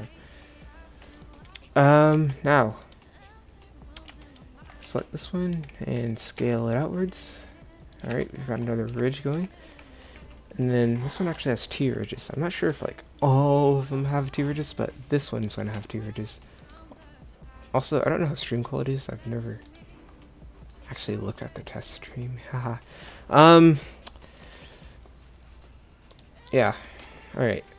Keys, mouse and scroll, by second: 2.2 a, 4.9 g, 8.2 Tab, 9.0 Tab, 9.5 a.